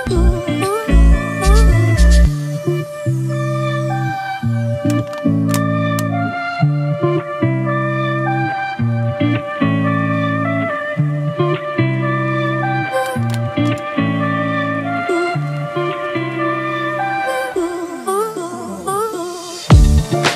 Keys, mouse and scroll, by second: 12.5 ctrl+t.